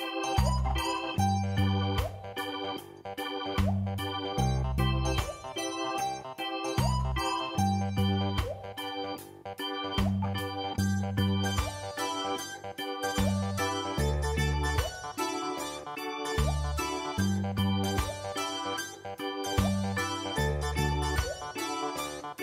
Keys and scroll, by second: 2.6 ctrl+space, 20.0 ctrl+v, 21.4 ctrl+v, 21.8 ctrl+space.